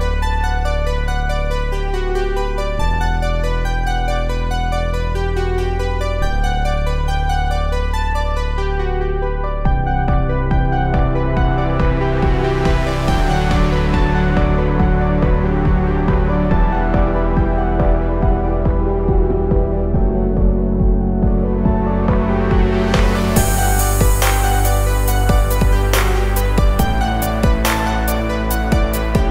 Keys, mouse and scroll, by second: 1.2-23.6 drag.